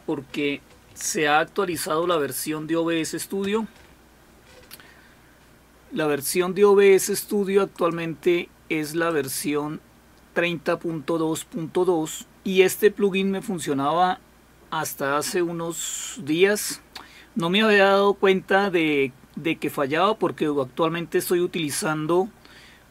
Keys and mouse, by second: 1.7 alt+super+d, 3.4 Return, 7.7 click, 9.1 click.